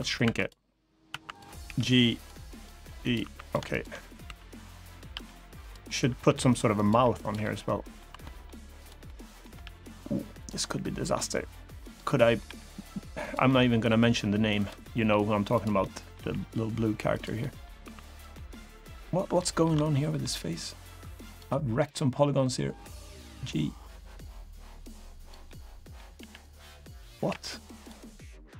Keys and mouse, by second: 0.0 2, 0.8 1, 1.4 g, 1.9 click, 2.3 click, 2.5 g, 2.7 click, 2.9 3, 3.5 shift+click, 4.0 s, 4.6 click, 4.8 g, 5.3 click, 5.6 middle click, 6.0 r, 6.5 click, 6.6 g, 6.9 click, 7.1 middle click, 7.8 2, 8.0 middle click, 8.5 click, 8.8 middle click, 9.3 g, 10.1 click, 10.3 middle click, 11.4 1, 11.6 click, 11.9 middle click, 12.2 g, 12.9 click, 13.2 middle click, 14.3 click, 14.3 g, 14.5 middle click, 15.3 click, 15.5 middle click, 16.8 click, 16.8 g, 17.1 middle click, 17.6 3, 18.1 middle click, 19.1 shift+middle click, 19.5 middle click, 22.4 2, 22.4 g, 24.9 click, 25.2 middle click, 25.9 g, 26.2 click, 27.0 g, 27.5 click, 28.5 3.